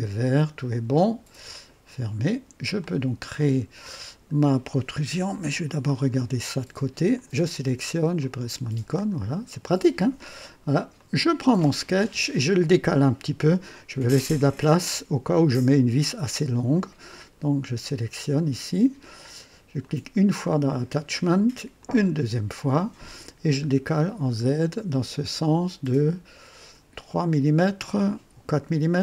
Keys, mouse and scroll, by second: 1.5 click, 2.8-4.4 drag, 5.3 KP_3, 5.9 scroll up 2, 7.1 click, 8.2 click, 8.9 scroll up 1, 9.5 right click, 10.9 click, 19.7 click, 21.7 click, 23.8 scroll down 2, 24.4-25.1 scroll up 4, 26.2 scroll up 2, 28.0 scroll up 2.